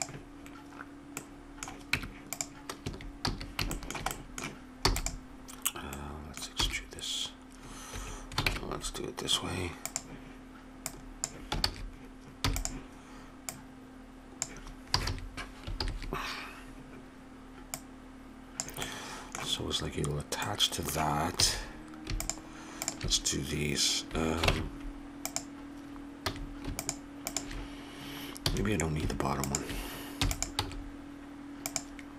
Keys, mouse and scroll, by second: 1.1 middle click, 1.9 Tab, 2.8 a, 3.2 a, 4.8 e, 6.6 e, 8.5 ctrl+Tab, 10.9 click, 11.6 ctrl+z, 12.4 e, 14.9 a, 15.1 a, 15.8 ctrl+n, 17.7 click, 18.8 middle click, 21.4 a, 22.2-24.7 drag, 24.5 ctrl+Tab, 26.3 a, 26.8-29.0 drag, 28.4 a, 29.4 click, 30.2 e, 30.6 s, 31.3-32.1 drag.